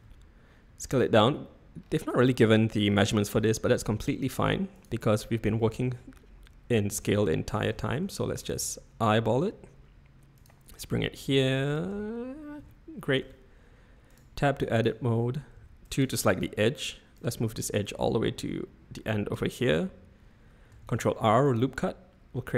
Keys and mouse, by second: 3.7 g, 4.7 g, 5.5 s, 7.6-8.6 typing, 11.2 s, 13.2 Tab, 14.1 click, 14.8 click, 15.5 2, 15.9 click, 17.2-19.3 drag, 20.8 ctrl+r.